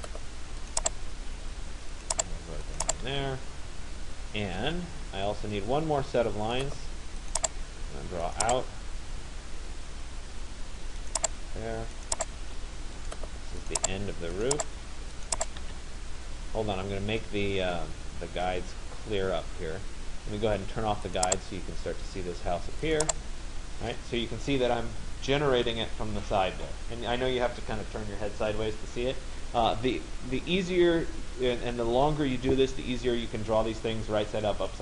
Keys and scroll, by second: 2.7 Return, 12.1 Return.